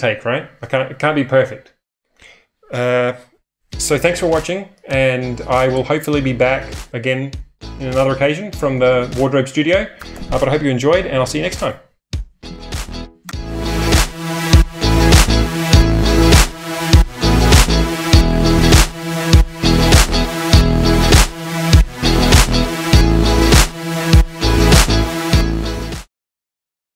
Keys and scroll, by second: 12.9 shift+super+@.